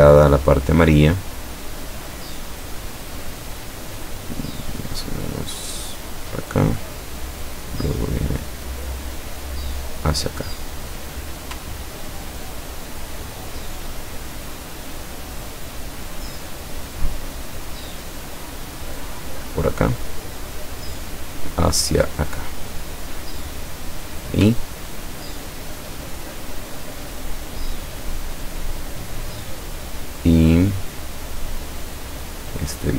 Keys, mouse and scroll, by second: 3.0 click, 6.8 click, 9.5 click, 12.0-12.6 ctrl+scroll up 2, 16.1 click, 17.5 click, 19.8 click, 22.2 click, 25.2-25.7 ctrl+scroll down 2, 30.8 click.